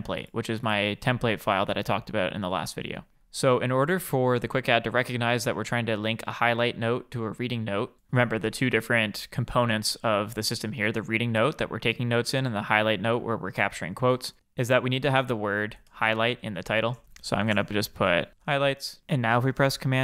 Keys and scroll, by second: 19.6 super+p.